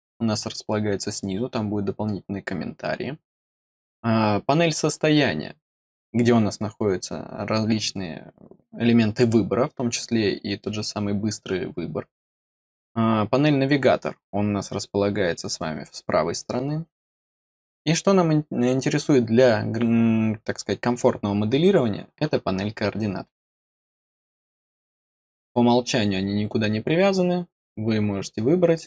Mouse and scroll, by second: 23.9 click, 26.4-28.8 drag.